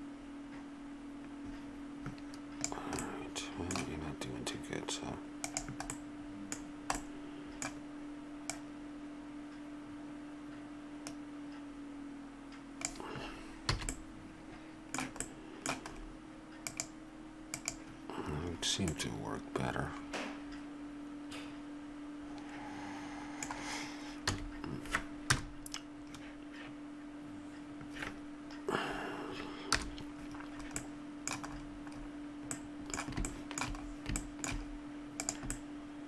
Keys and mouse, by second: 5.5 click, 5.9-7.6 middle drag, 8.5-10.3 drag, 13.7 a, 14.1-15.9 middle drag, 16.6 right click, 17.2-19.4 drag, 18.5 middle click, 20.1 middle click, 24.2 a, 25.3 KP_0, 29.7 KP_0, 30.9 middle click, 33.3 click, 34.3 middle click, 35.2-36.0 drag.